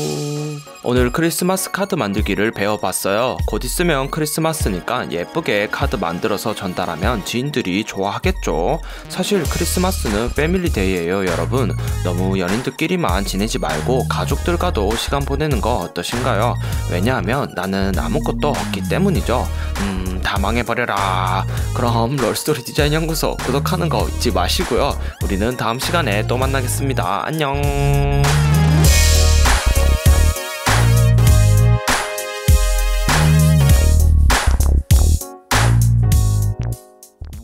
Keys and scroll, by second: 3.8 super+=, 4.9 super+-, 5.8 alt+super+0, 6.3 super+=, 6.8 super+-.